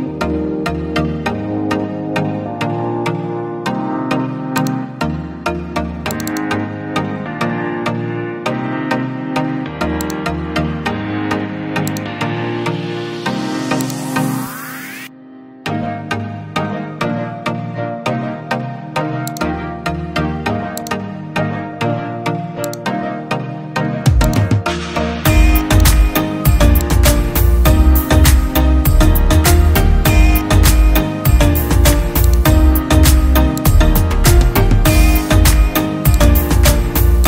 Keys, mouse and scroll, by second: 6.3 double click, 7.2-11.0 scroll down 1, 17.3 scroll up 1, 30.7 scroll down 1, 35.2 Delete, 36.0 scroll up 1.